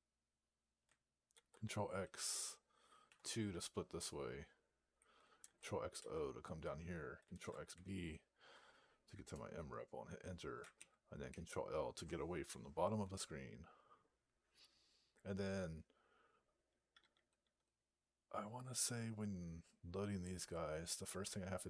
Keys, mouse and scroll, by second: 9.1 Return, 10.6 ctrl+l, 11.2 ctrl+l.